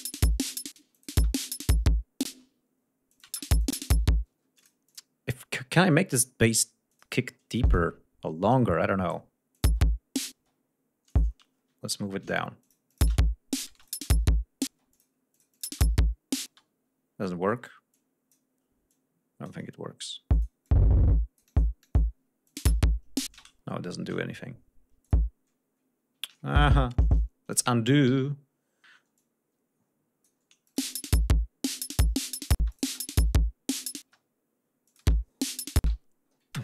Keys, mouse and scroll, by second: 0.8 space, 0.9 click, 2.3 space, 2.5-2.9 scroll up 1, 3.1 click, 3.3 space, 3.6 click, 4.3 space, 4.6 click, 4.9 click, 5.9 click, 6.9 click, 7.1 e, 7.7 click, 8.5 click, 9.5 click, 9.7 space, 10.4 space, 11.1 click, 11.9 alt+shift+Down, 12.6-13.2 alt+shift+drag, 13.1-16.5 typing, 13.8 click, 14.9 click, 15.3-15.8 drag, 17.9 click, 18.9 click, 20.3 click, 20.7 click, 21.8 click, 22.5 click, 22.6 space, 23.4 space, 23.9 shift+right click, 24.2 shift+d, 25.0 click, 26.3 ctrl+y, 28.1 g, 29.2-30.5 drag, 30.7 click, 30.8 space, 32.6 space, 32.7 click, 34.1 space, 34.2 scroll down 1, 34.9 click, 35.0 space, 35.2 scroll down 2, 35.8 space.